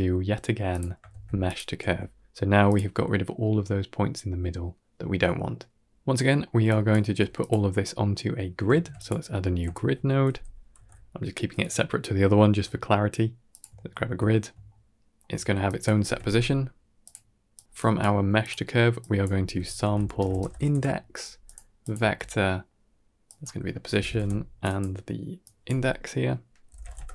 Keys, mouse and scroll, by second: 0.6 click, 1.0 shift+d, 1.7 g, 5.9 middle click, 6.3 middle click, 6.5 drag, 7.0 g, 8.3 scroll up 1, 8.8 shift+a, 10.0 BackSpace, 12.9 ctrl+scroll up 2, 13.2 middle click, 13.7 ctrl+middle click, 14.7-16.7 drag, 17.0-17.4 middle drag, 17.6 drag, 18.0 g, 18.9-21.4 drag, 21.7 click, 22.3 middle click, 23.3-24.7 drag, 25.3-27.1 drag.